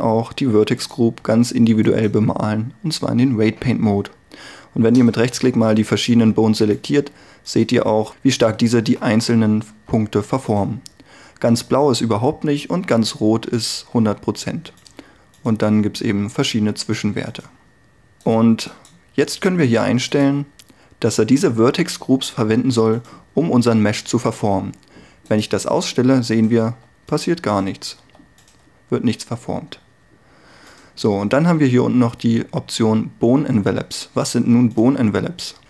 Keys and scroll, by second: 9.8 r, 13.8 r, 23.6 r, 26.8 r.